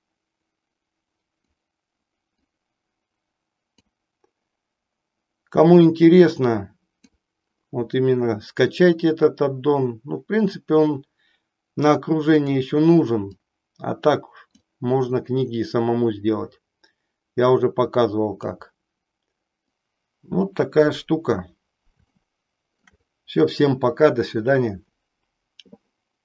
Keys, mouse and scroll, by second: 2.3-3.7 drag, 5.8-7.3 drag, 9.2-12.5 drag, 13.3-14.7 drag, 15.4-18.4 drag, 22.1 shift+middle click.